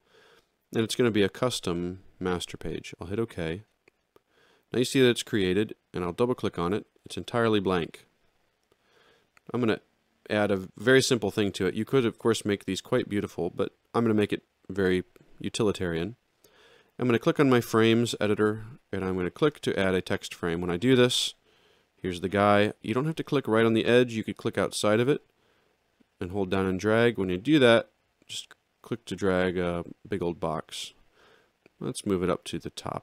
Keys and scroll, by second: 7.0 alt+x.